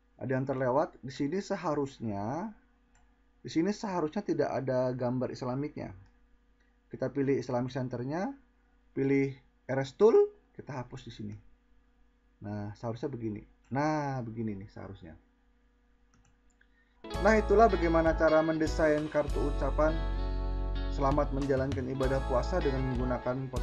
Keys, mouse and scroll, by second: 6.3-6.7 drag, 8.0 click.